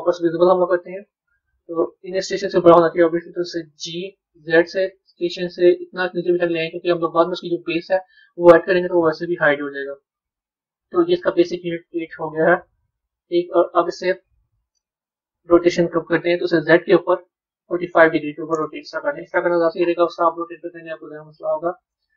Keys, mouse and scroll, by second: 0.2 click, 10.4-11.6 middle drag, 11.6 Tab, 12.3-12.8 scroll down 3, 12.8-15.4 middle drag, 15.4 click, 16.5-19.5 drag, 20.6-22.1 middle drag.